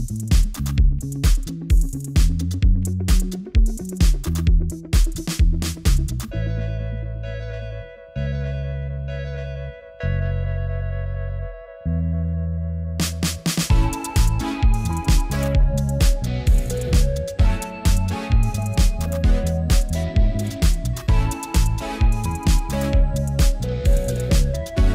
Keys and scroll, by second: 6.6 b.